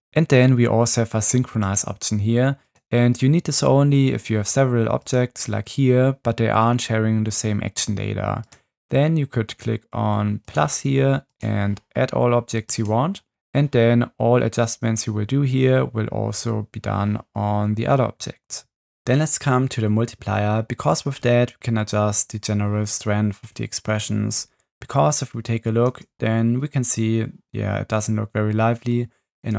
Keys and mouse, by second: 1.6 click, 2.6 click, 8.4 click, 25.9 space.